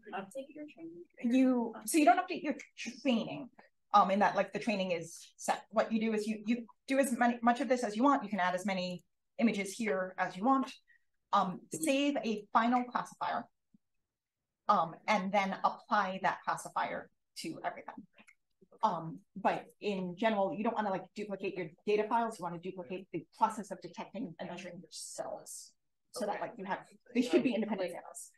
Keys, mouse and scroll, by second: 8.8 click.